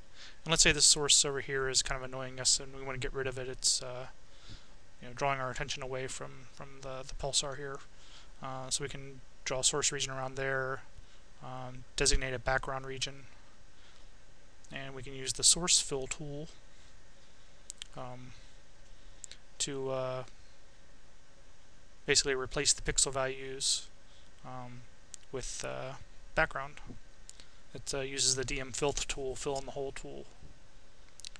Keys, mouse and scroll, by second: 1.5-2.7 drag, 4.8-6.2 drag, 7.9-8.9 drag, 11.7 b, 16.5 click, 17.9 click, 20.0 click, 21.9 click, 23.0 click, 24.3-26.4 right drag, 26.4 Tab, 27.3 Tab.